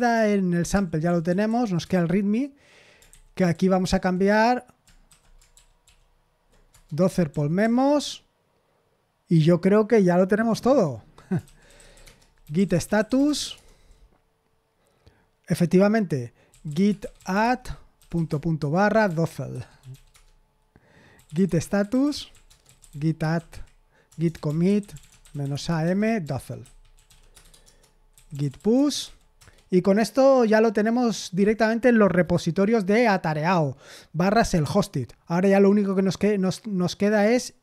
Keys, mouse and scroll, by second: 0.1-1.4 typing, 1.8 Return, 3.1 ctrl+n, 3.5 j, 5.0 shift+;, 5.5 ctrl+p, 5.8 ctrl+p, 6.5-7.7 typing, 6.7 Return, 11.2-13.9 typing, 16.2-29.5 typing.